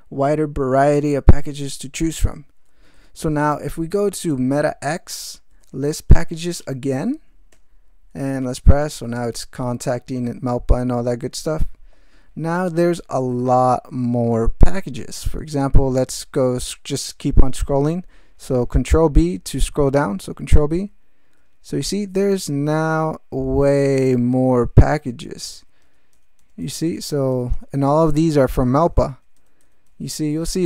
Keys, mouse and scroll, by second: 4.3 alt+x, 5.3-6.9 typing, 7.5 Return, 20.1 ctrl+v, 20.9 ctrl+v.